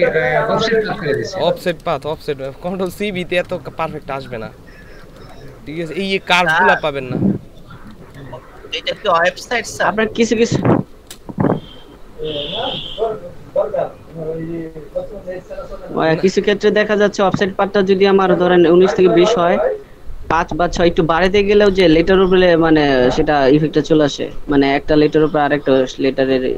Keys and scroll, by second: 0.3 space, 1.2 space, 1.8 space, 3.2 ctrl+space, 5.8 ctrl+space, 7.8 ctrl+space, 8.6 ctrl+space, 9.6 ctrl+space.